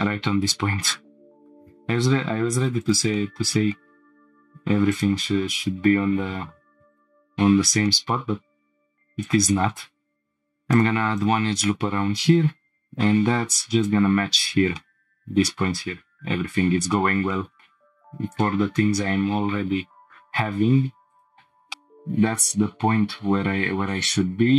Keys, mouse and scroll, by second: 1.4 click, 1.4 g, 1.5 y, 2.8 click, 3.1 middle click, 4.9-6.0 drag, 6.0 g, 6.4 y, 7.4 scroll down 1, 7.9 shift+middle click, 9.2 click, 10.1 scroll up 3, 10.2 ctrl+r, 10.2 shift+middle click, 11.2 right click, 12.6 g, 12.8 z, 13.7 click, 14.3 scroll down 2, 14.7-16.8 middle drag, 16.9 shift+middle click, 17.3 middle click, 18.3 click, 19.6 scroll down 1, 21.1 click, 21.3 shift+middle click, 21.7 scroll up 2.